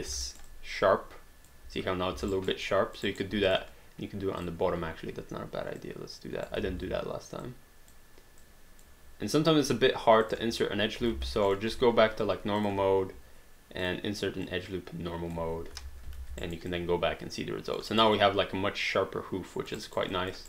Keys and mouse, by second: 0.3 alt+right click, 0.5 alt+click, 2.3 alt+right click, 2.7 alt+click, 3.0 alt+right click, 3.5 click, 5.8 click, 6.7 ctrl+z, 7.4 click, 10.2 click, 11.1 alt+d, 11.5 click, 11.7 1, 12.6 click, 13.9 click, 15.8 3, 16.2 alt+d, 16.4 alt+right click, 16.7 alt+click, 17.9 alt+right click, 18.2 alt+click, 19.8 alt+right click, 20.2 alt+click.